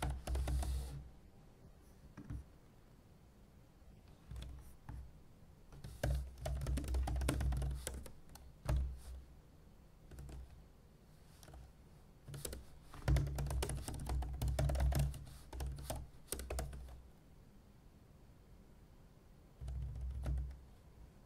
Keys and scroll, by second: 0.0-1.1 typing, 4.4 super+w, 6.0 super+n, 6.1-8.4 typing.